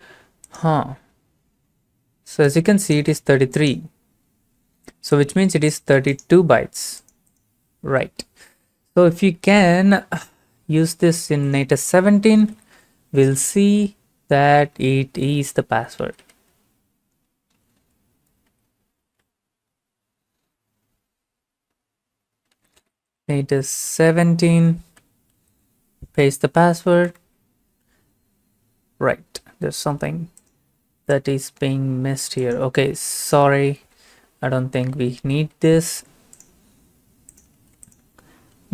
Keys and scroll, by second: 12.1-13.3 typing, 13.6 Left, 14.1 Left, 14.2-15.4 Left, 16.0 Right, 16.2 Right, 17.7 BackSpace, 17.8 7, 18.5 Return, 22.3-25.0 typing, 25.3 ctrl+c, 26.5 ctrl+v, 27.1 Return, 34.3 BackSpace, 34.9 ctrl+a, 35.4 ctrl+c, 35.8 ctrl+c, 37.5 ctrl+v, 38.5-38.7 typing.